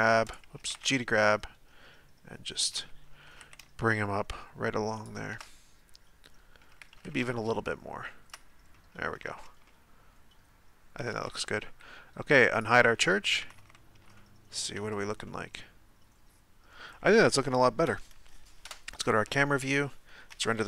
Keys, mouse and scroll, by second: 0.6 g, 5.5-6.8 middle drag, 6.8 g, 8.7 middle click, 9.3 Tab, 9.7-11.1 middle drag, 11.1-12.5 scroll down 4, 12.5 click, 13.0-13.4 middle drag, 13.4 a, 13.6 a, 14.2-18.6 shift+middle drag, 18.6 KP_0.